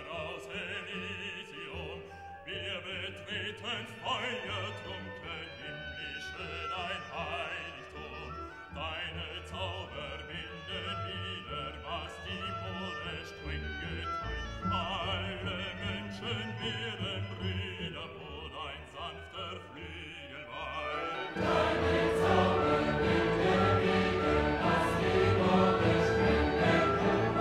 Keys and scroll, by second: 0.3 ctrl++, 1.5 ctrl+-, 3.0 ctrl++, 4.4 ctrl+alt+-.